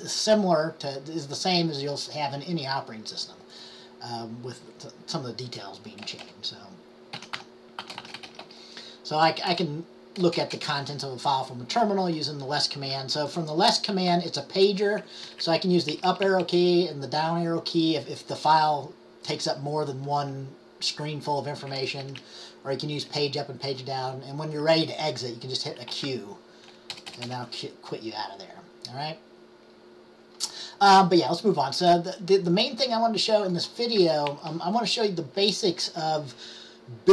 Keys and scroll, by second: 7.1-9.6 typing, 15.8-16.5 typing, 22.2 Up, 22.3 Up, 26.0 q, 34.4 Down.